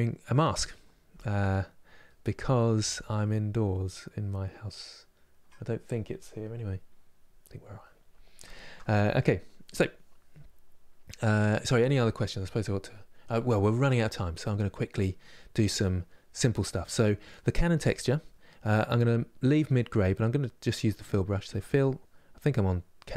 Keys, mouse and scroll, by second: 21.2-23.1 drag.